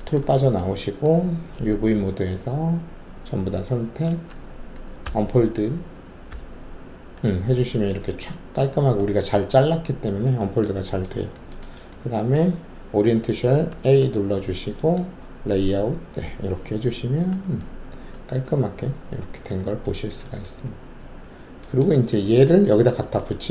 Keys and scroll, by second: 1.9 alt+4, 5.0 d, 6.3 d, 13.7 a, 15.5 alt+z, 20.8 alt+`.